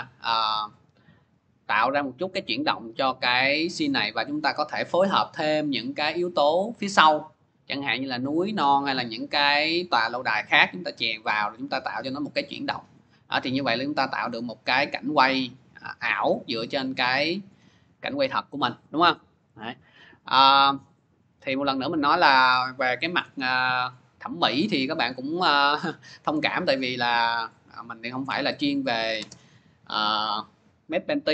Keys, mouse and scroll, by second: 17.3 click, 21.0 click, 21.2 click, 24.1 click, 27.2-31.3 drag.